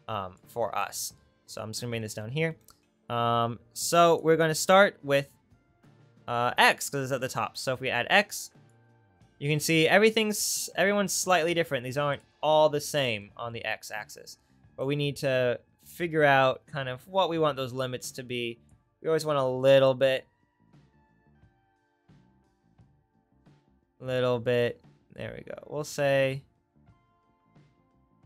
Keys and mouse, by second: 12.3-14.9 right drag, 14.9-28.2 middle drag.